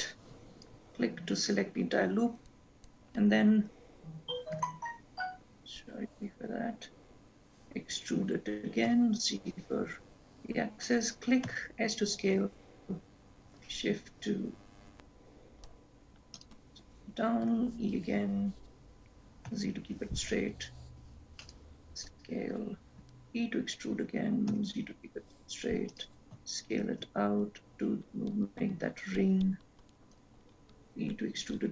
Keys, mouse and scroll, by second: 0.8 alt+click, 4.7 e, 11.6 s, 17.6 e, 23.2 e, 26.5 s, 31.0 e.